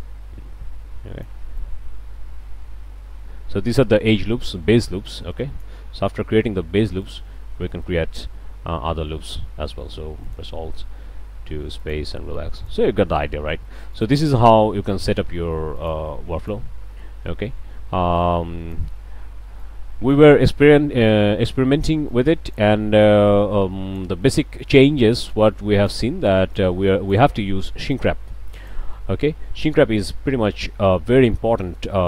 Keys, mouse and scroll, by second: 1.6-5.8 drag, 6.2 q, 7.0 drag, 7.8-8.4 drag, 9.1 a, 10.2 alt+click, 11.8 click, 12.6-12.9 drag, 13.3 a, 13.9 alt+drag, 14.9 click, 15.8 click, 16.4 click, 16.9-17.2 drag, 17.4 alt+a, 18.2 click, 19.6 click, 20.7-21.4 middle drag, 22.1 click, 23.0-24.2 drag, 25.5 click, 26.5 click, 27.9 click, 28.9-30.7 middle drag, 30.6 Tab, 30.8-31.5 middle drag, 31.5 shift+click, 31.6-32.0 shift+drag.